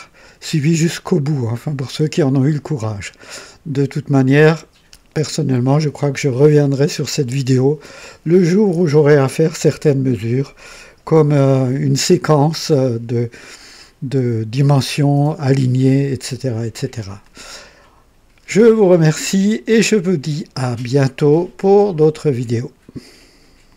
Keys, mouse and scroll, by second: 17.2-19.6 drag, 22.5 right click, 23.7 click.